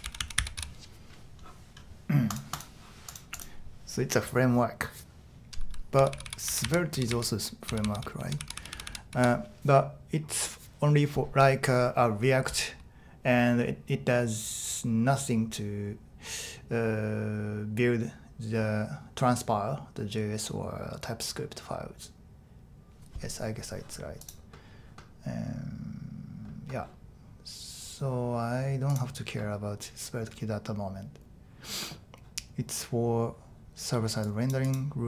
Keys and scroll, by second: 0.0-1.1 typing, 5.7-9.6 typing.